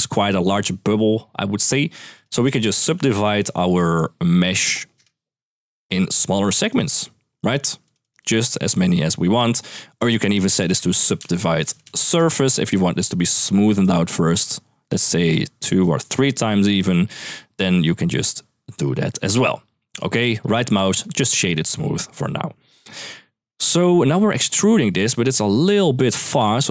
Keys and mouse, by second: 1.9 click, 2.3 shift+a, 5.3 click, 6.2 click, 6.4 click, 6.5 click, 7.6 click, 7.8 click, 8.0 click, 10.2 ctrl+x, 10.4 shift+a, 11.6 Down, 12.4 click, 13.5 click, 15.5 click, 20.2 right click, 22.4 middle click, 23.0 middle click, 24.3 middle click, 24.9 middle click, 25.6-26.7 shift+drag.